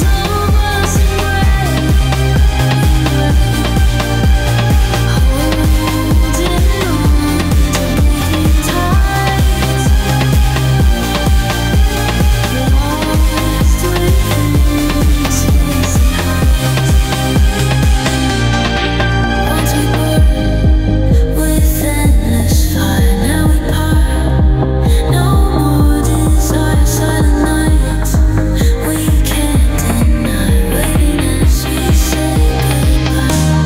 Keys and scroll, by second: 1.9 ctrl+f, 5.0 Delete, 5.9 ctrl+z, 10.2 ctrl+z, 12.9 ctrl+z, 18.6 i, 20.9 space, 31.1 ctrl+shift+].